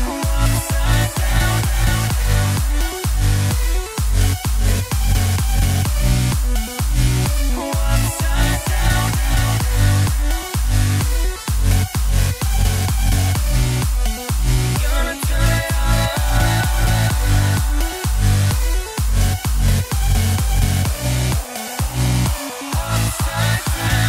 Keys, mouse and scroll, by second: 0.0 click, 1.1 scroll down 3, 1.3-2.9 middle drag, 2.9 KP_1, 3.5-4.8 middle drag, 4.8 KP_1, 5.9 b, 6.5 click, 9.2 click, 9.5-10.0 scroll up 4, 11.8 click, 12.7 KP_0, 13.3-14.0 scroll down 2, 14.0 click, 16.1-17.4 drag, 17.4 g, 19.6-20.6 drag, 20.6 g, 21.5 scroll up 3, 21.7 z, 22.5-22.8 scroll down 1, 22.8-23.7 shift+middle drag, 23.7 click.